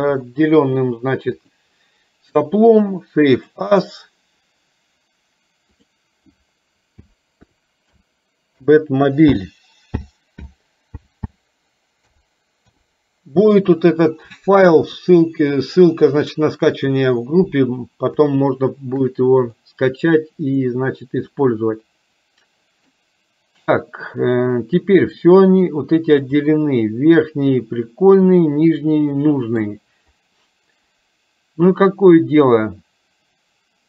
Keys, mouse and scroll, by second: 1.5-3.9 drag, 15.0 KP_3, 18.4 shift+middle click, 19.7 middle click, 21.4-23.1 middle drag, 26.7-29.7 middle drag.